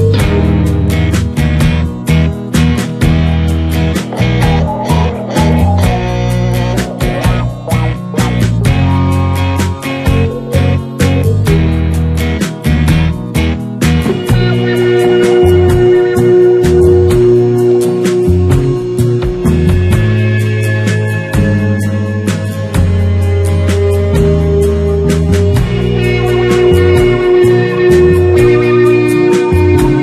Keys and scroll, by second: 0.2 space, 1.7 space, 3.4 [, 10.2 space, 11.2 space, 13.6 space, 23.4 space.